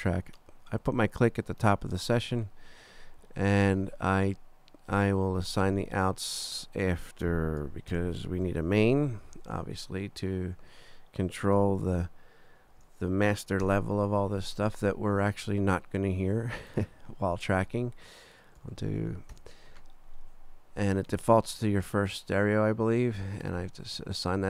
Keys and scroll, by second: 7.9 shift+super+n, 8.7 shift+super+Right, 9.1 super+Down, 11.9 super+Down, 13.6 super+Return, 17.7 Right, 18.6 BackSpace, 19.3 Return.